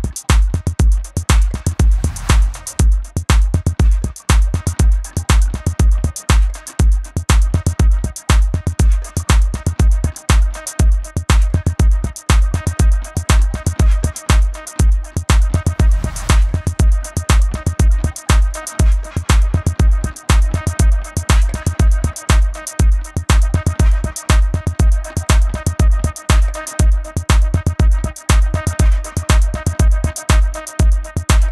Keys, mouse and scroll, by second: 3.7 click, 17.4 Delete, 19.9 click, 27.5 ctrl+z, 28.0 shift+click, 30.1 ctrl+alt+click.